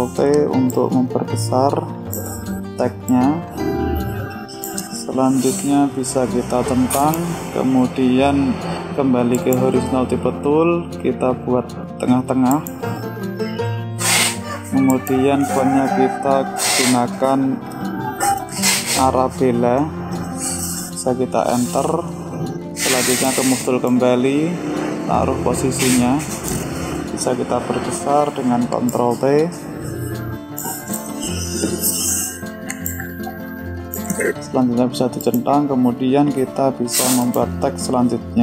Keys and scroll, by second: 0.0 ctrl+t, 28.1 ctrl+t.